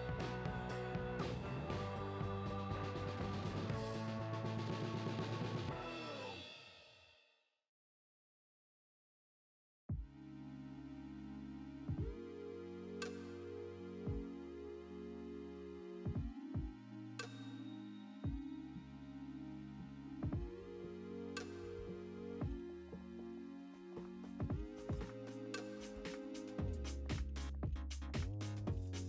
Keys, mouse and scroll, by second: 0.2 click, 0.6 Tab, 0.8 click, 1.1 ctrl+l, 1.4 d, 1.6 r, 2.2 click, 2.5 s, 2.8 click, 3.0 f, 4.1-6.6 typing, 5.4-5.9 scroll down 2, 6.3 alt+a, 7.5 ctrl+l, 7.8 shift+d, 9.0 r, 10.4 click, 11.2 alt+a, 12.0 click, 12.2 z, 13.0 Tab, 13.4 ctrl+l, 13.7-16.1 typing, 14.0 scroll up 2, 14.4 shift+right click, 15.7 click, 17.6 Tab, 17.8 z, 18.5 KP_1, 19.1 Tab, 19.4 scroll up 1, 19.7 z, 19.8 alt+a, 20.3 c, 20.6 alt+a, 21.2 c, 22.2-23.4 drag, 23.4 `, 25.4-27.0 drag, 25.6 scroll down 2, 25.7 KP_1, 26.2 scroll down 2, 26.3-27.1 scroll up 4, 26.9 ., 27.1 scroll down 2, 27.3 scroll up 2, 27.4 alt+a, 27.8 c, 28.2 right click, 28.4-29.0 drag.